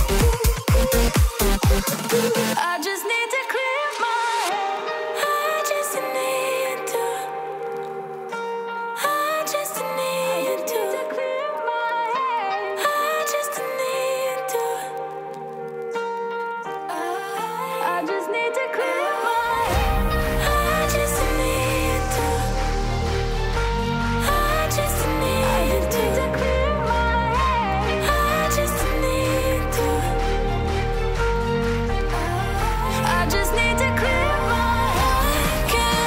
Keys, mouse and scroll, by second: 1.3 b, 6.8 Return, 8.2 [, 25.8 alt+click, 28.7 alt+click, 30.0 ].